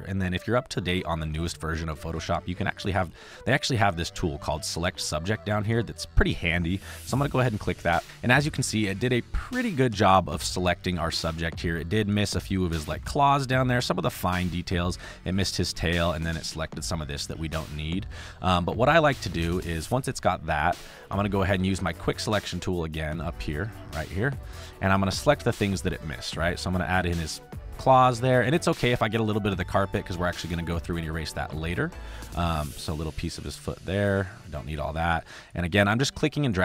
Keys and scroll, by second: 31.4 ctrl+z.